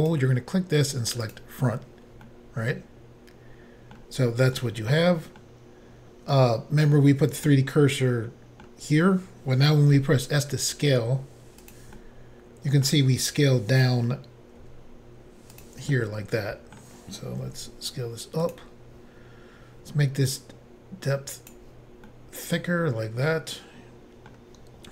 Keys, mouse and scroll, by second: 0.0 click, 0.1 click, 1.3 click, 1.4 click, 2.3 middle click, 4.6 middle click, 7.5 middle click, 9.9 s, 11.6 click, 11.7 click, 12.0 middle click, 14.6 s, 15.5 click, 15.6 click, 15.9 middle click, 17.4 s, 18.5 click, 18.5 click, 20.3 click, 22.1 middle click.